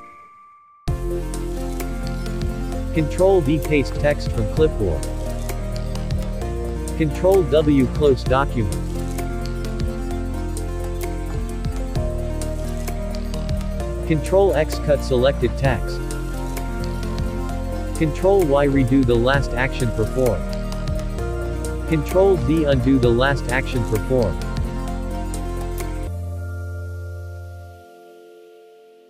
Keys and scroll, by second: 2.9 ctrl+v, 10.8 ctrl+w, 13.9 ctrl+x, 22.0 ctrl+z.